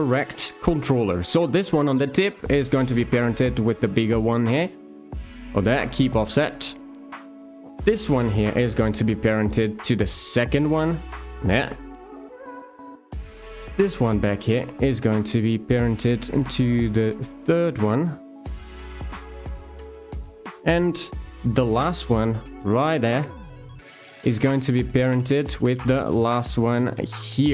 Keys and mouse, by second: 0.0 shift+middle click, 1.5 click, 3.2 shift+click, 4.5 d, 6.8 alt+click, 9.4 alt+shift+click, 10.7 d, 13.6 alt+click, 18.9 d, 21.1 shift+middle click, 23.1 alt+click.